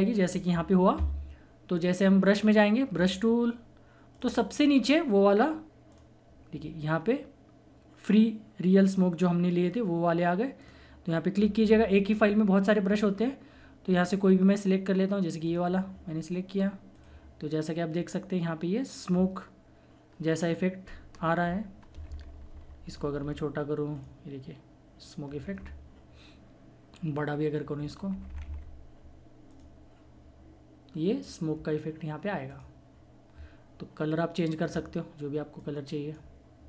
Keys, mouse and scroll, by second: 2.2 right click, 2.9 click, 6.5-8.3 scroll down 1, 10.6 click, 11.3-13.5 scroll down 1, 13.5-15.3 scroll up 1, 15.4 click, 22.0-23.2 typing, 23.9 click, 24.0 click, 25.6-27.2 typing, 29.5 click, 30.0 typing, 32.5 click.